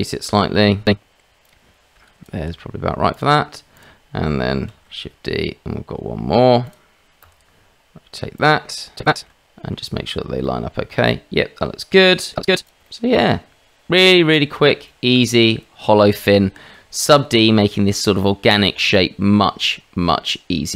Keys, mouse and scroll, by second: 1.8 g, 3.1 click, 4.7 shift+d, 7.2 r, 9.0 g, 9.3-9.7 middle drag, 10.5-11.9 middle drag, 12.5 middle drag, 12.9-13.2 middle drag, 14.9 shift+middle drag, 15.4-16.3 middle drag.